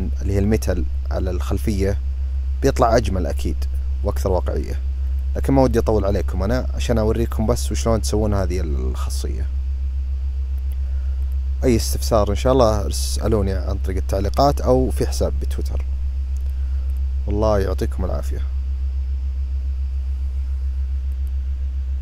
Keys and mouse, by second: 4.9-5.5 drag, 10.9 click, 16.1 click, 16.6 click, 20.9 click.